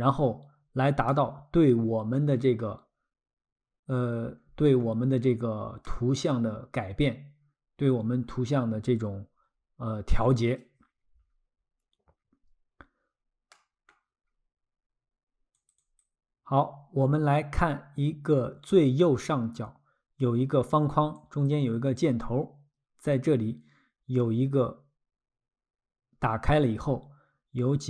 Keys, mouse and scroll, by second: 1.1 middle click, 3.6 scroll, 5.8 middle click, 11.2-11.8 scroll, 13.5 middle click, 14.3-14.8 scroll, 15.6 click, 21.2 click.